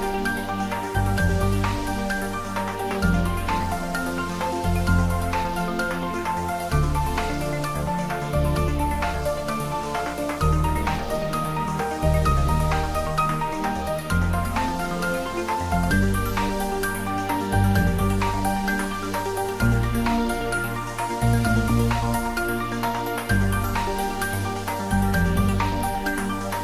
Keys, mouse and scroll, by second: 3.8 alt+shift+click, 4.8 shift+scroll down 1, 5.9-11.2 middle drag, 15.6-16.5 scroll up 1, 18.9 scroll up 1, 20.2 alt+shift+click, 22.7-23.3 scroll down 1, 23.3-24.0 scroll up 1, 24.0-24.8 scroll down 1, 24.8 click.